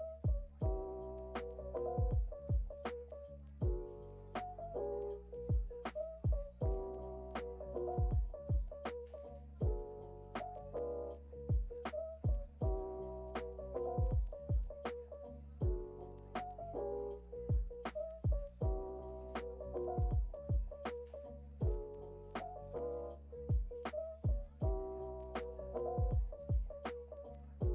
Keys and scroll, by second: 0.1 o, 3.1 super+[, 4.7 super+[, 10.0 o, 11.7 o, 13.9 Delete, 15.6 Delete.